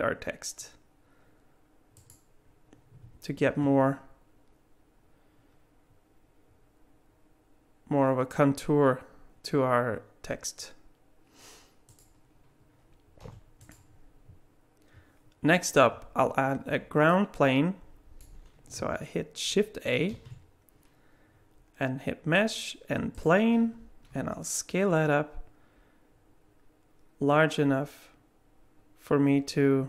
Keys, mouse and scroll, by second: 3.4 shift+d, 13.2 g, 16.4-16.8 scroll down 1, 17.1 middle click, 20.1 shift+a, 24.1 s.